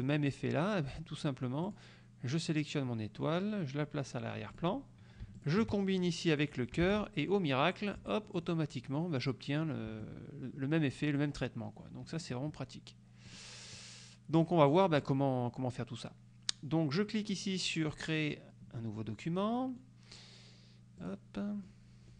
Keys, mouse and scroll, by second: 1.7 click, 4.6 click, 5.5 shift+click, 7.0 ctrl+k, 7.5 ctrl+click, 8.1 F2, 8.4 click, 10.0 F1, 12.0 F2, 12.3 click, 13.4 click, 13.9 click, 15.1 click, 18.0 click, 19.7 click, 21.1 click, 21.7 click.